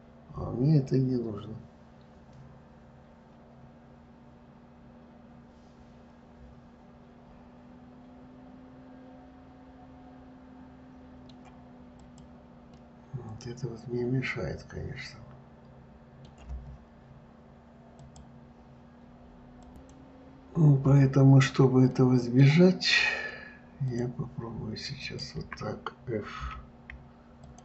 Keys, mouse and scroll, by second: 12.4 click, 13.1-16.1 middle drag, 22.2-24.2 middle drag, 24.2 click, 25.3 shift+click, 26.7 f.